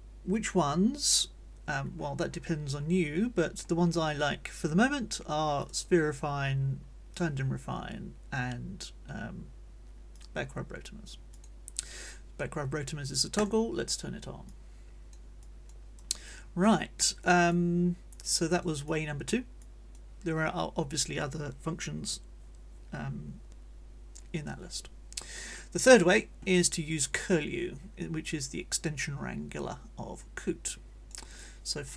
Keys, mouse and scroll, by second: 1.9 middle click, 2.7 middle click, 3.7 middle click, 5.6 click, 7.1 click, 11.3 click, 13.4 click, 14.5 click, 15.4 click, 16.0 click, 17.3 click, 18.1-19.5 drag, 19.6 click, 30.7 click.